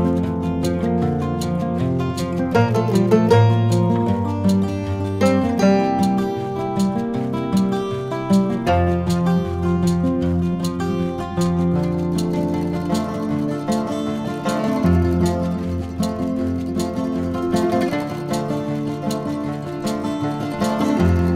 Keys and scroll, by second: 0.3 1, 11.3 s.